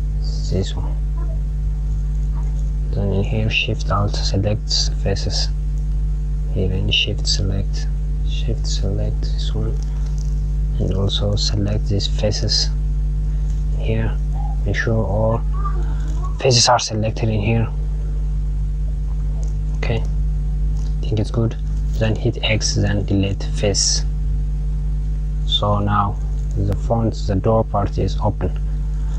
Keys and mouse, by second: 1.1 click, 3.5 alt+shift+click, 4.9 alt+shift+click, 6.4 shift+click, 7.8 shift+click, 9.1 shift+click, 11.3 shift+click, 14.0 click, 17.2 click, 24.7 click, 28.8 click.